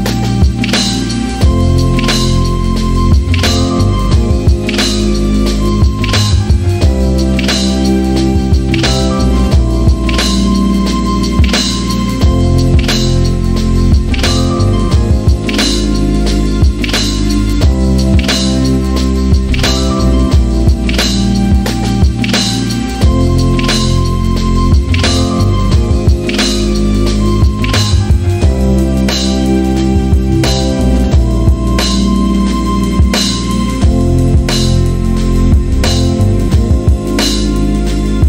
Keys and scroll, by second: 1.7 e, 8.1-9.1 typing, 9.8 Return, 31.2 c, 33.3-34.4 typing, 34.7 Return, 35.9 c.